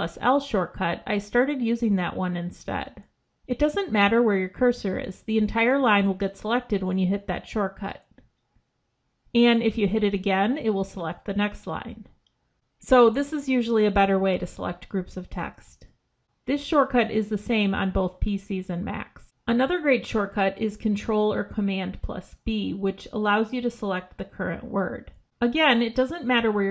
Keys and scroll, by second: 6.1 ctrl+l, 10.2 ctrl+l, 13.8 ctrl+l, 23.2 ctrl+b.